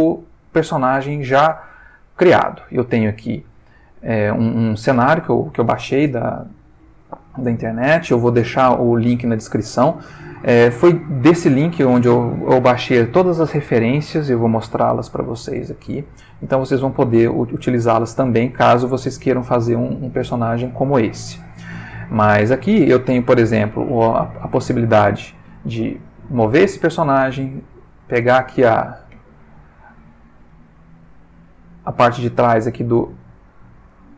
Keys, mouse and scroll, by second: 1.8-2.5 ctrl+middle drag, 3.8-5.0 ctrl+middle drag, 8.0-9.2 ctrl+middle drag, 11.1 ctrl+middle click, 15.9 ctrl+middle click, 19.9 ctrl+middle click, 22.7 click, 23.3 g, 27.0 click, 27.7 click, 28.4 g, 29.3 Escape, 29.6 click, 30.5 g, 33.0 click, 34.0 ctrl+middle click.